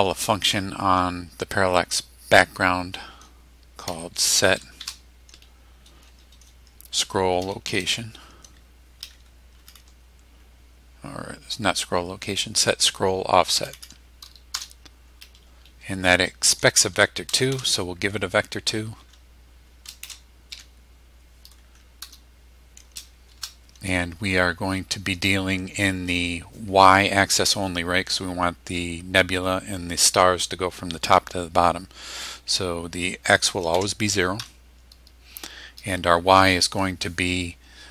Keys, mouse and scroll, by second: 3.6-4.8 typing, 7.4 s, 7.7 c, 9.6 Down, 13.5 Down, 14.6 Return, 17.5 shift+v, 19.0 BackSpace, 20.0 shift+v, 20.5 shift+e, 22.0 Return, 23.3 shift+9, 33.7 0, 34.4 ,.